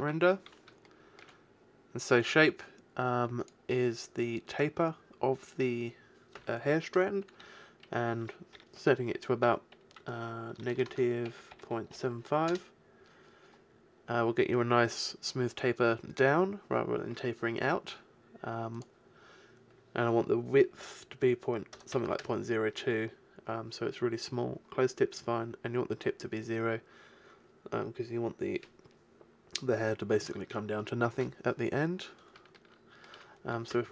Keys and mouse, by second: 0.0 Escape, 4.4 click, 5.2 click, 10.9 BackSpace, 11.1 BackSpace, 18.9-29.5 drag.